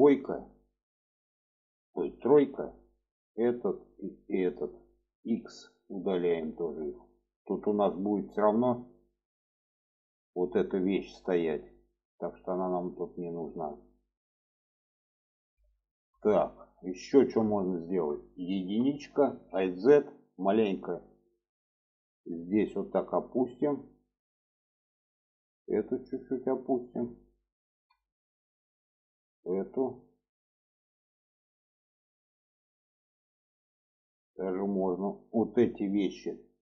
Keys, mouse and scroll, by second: 2.0 3, 2.2 click, 3.2 click, 4.0 click, 5.2 x, 6.5 click, 7.1 middle click, 8.3 middle click, 14.2 middle click, 15.1 middle click, 16.1 shift+middle click, 16.9 shift+middle click, 17.5 shift+middle click, 18.4 1, 19.0 alt+z, 19.9-20.7 drag, 21.8 click, 24.4 click, 25.3-26.8 drag, 27.1 shift+middle click, 27.8 shift+middle click, 28.5 click, 29.5 click, 30.6 shift+middle click, 31.6 shift+middle click, 33.9 shift+middle click, 34.6 click, 36.5-36.6 drag.